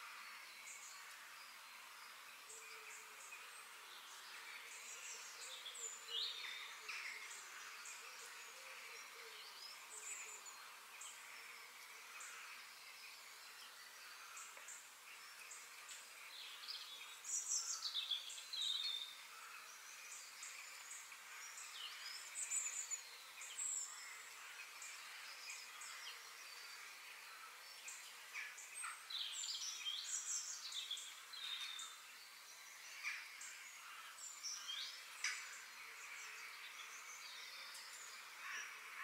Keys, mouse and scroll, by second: 0.3 click, 0.8 f, 3.0-3.6 scroll up 3, 3.6 KP_3, 4.5-6.4 shift+middle drag, 17.9-19.8 middle drag, 20.4-22.3 middle drag, 22.4-23.2 scroll down 1, 23.4 click, 24.1 f, 27.6-29.5 middle drag, 38.2-39.0 middle drag.